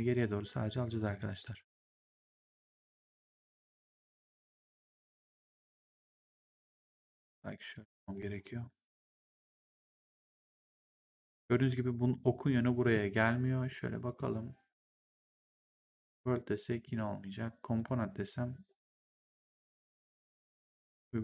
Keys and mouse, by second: 0.9 click, 2.8 w, 4.0 click, 7.1 click, 8.3 3, 9.1 ctrl+1, 14.0 click, 15.2 click, 19.0 click.